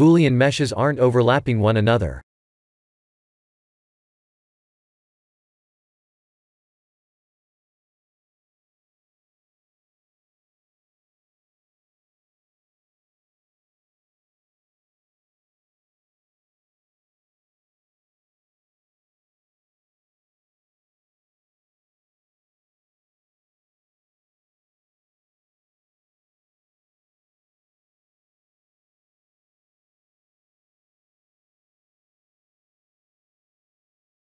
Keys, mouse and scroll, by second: 1.4 middle click, 2.9 KP_1, 4.4 click, 4.9 click, 7.1 click, 8.2 Tab, 8.8 click, 9.8-11.8 typing, 12.4 click, 13.9 l, 14.6 Tab, 15.1 click, 15.6-16.2 scroll down 1, 16.2 middle click, 16.2-17.6 scroll down 2, 18.5 middle click, 18.5 scroll down 2, 23.3 KP_1, 24.3-25.5 scroll up 4, 25.5 click, 26.0 shift+middle click, 26.9 shift+z, 28.5 g, 32.5 click, 33.3 Tab.